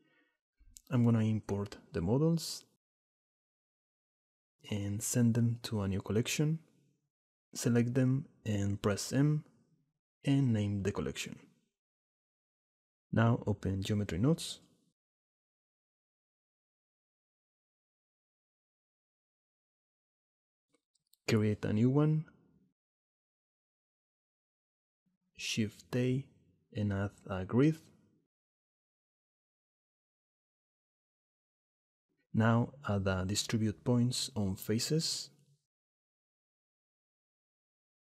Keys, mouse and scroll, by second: 4.4 click, 4.9 s, 5.4 click, 5.6 s, 6.5 ctrl+a, 8.0 m, 13.4-14.5 shift+middle drag, 15.5 shift+middle click, 17.2-21.3 drag, 23.7 middle click, 24.9 click, 25.6 x, 26.5 shift+a, 30.9-31.6 drag, 33.7 shift+a.